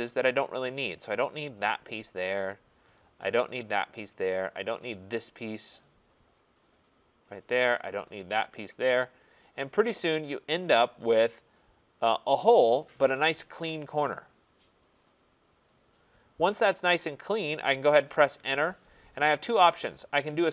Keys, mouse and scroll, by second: 0.4 right click, 1.7 click, 2.9 right click, 3.6 click, 5.0 click, 6.7 click, 8.3 click, 17.4 right click, 18.3 Return.